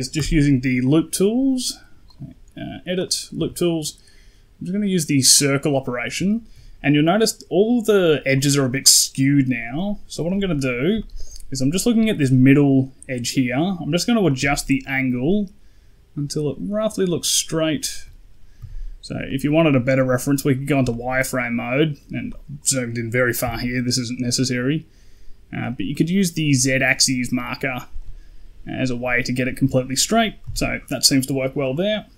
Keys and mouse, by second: 0.0 n, 2.0 click, 3.2 KP_1, 5.3 click, 5.3 typing, 6.1 shift+middle click, 10.2 shift+middle click, 10.9 shift+middle click, 14.1-17.8 shift+drag, 18.5 z, 19.1 shift+middle click, 20.8 shift+middle click, 23.3-27.9 shift+drag, 30.3 z, 31.8 middle click.